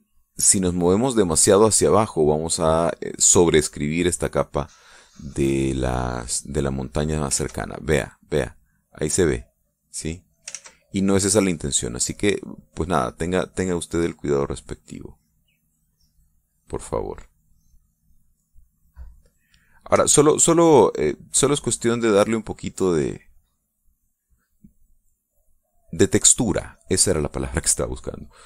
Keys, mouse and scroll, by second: 5.4 middle click, 7.1-8.2 drag, 8.3 ctrl+z, 9.5-11.5 drag, 11.5 ctrl+z, 12.6-20.5 drag, 22.0-23.3 drag, 24.0 click, 26.0 click, 26.6 click, 27.0-28.4 drag.